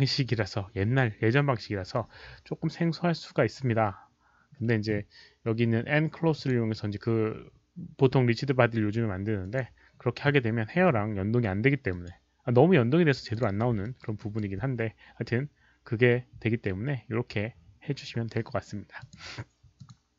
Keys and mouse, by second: 6.1 alt+middle click, 6.1 alt+right click, 6.3 click, 9.4 click, 11.9 click, 13.3 click, 13.8 alt+middle click, 14.2 alt+right click, 14.6 alt+middle click, 14.6 click, 19.0 click, 19.7 click.